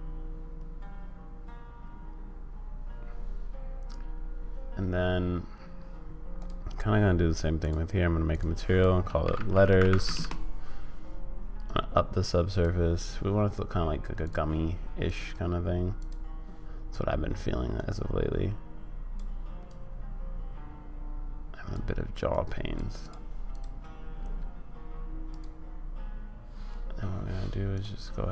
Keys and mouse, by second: 7.6-10.8 drag, 9.6 t, 11.6-12.6 drag, 14.2 click, 15.0 click, 15.9 click, 17.8-19.1 drag, 19.8-21.7 drag, 22.4 click, 23.0 click, 27.7 click.